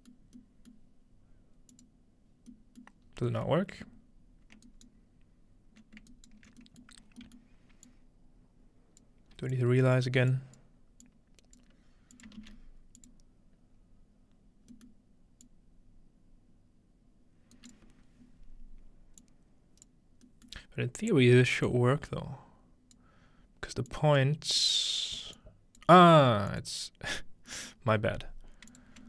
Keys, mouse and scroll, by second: 1.7-3.1 drag, 3.1-4.6 scroll up 1, 3.5-5.7 middle drag, 4.7-6.6 ctrl+alt+right drag, 6.6-9.0 ctrl+alt+middle drag, 7.0-7.9 scroll down 2, 7.9-10.0 drag, 10.3 click, 11.0 click, 12.1 click, 12.4 shift+d, 13.0 click, 13.3 click, 14.7-17.6 middle drag, 15.4-18.0 drag, 17.6 right click, 19.2 click, 21.7-23.0 drag, 23.9 click, 24.6 click, 25.4 click, 26.5 click, 28.7 click.